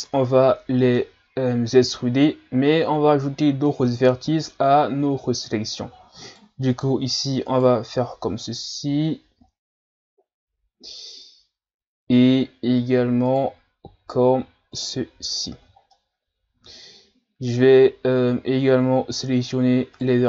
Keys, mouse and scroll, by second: 0.0-0.3 shift+scroll up 1, 0.3-1.3 middle drag, 1.3-2.4 scroll down 1, 3.7-6.2 middle drag, 6.2 shift+right click, 6.7 shift+right click, 7.5 shift+right click, 13.3 shift+right click, 14.8 shift+right click, 15.4 shift+right click, 15.9-19.0 middle drag, 19.1 shift+right click, 19.9 shift+right click.